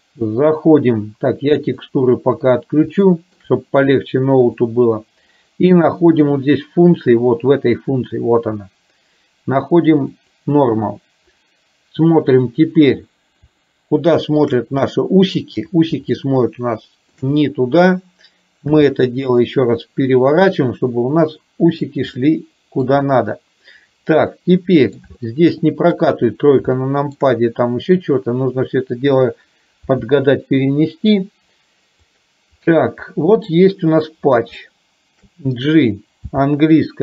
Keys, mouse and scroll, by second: 3.0 shift+middle click, 4.7-11.0 drag, 13.6 shift+middle click, 14.9 shift+middle click, 16.1-17.2 shift+middle drag, 18.9 r, 22.3 middle click, 24.5 middle click, 25.1 shift+middle click, 26.9 shift+middle click, 30.2 r, 33.6 middle click, 34.7 shift+middle click, 36.2 g.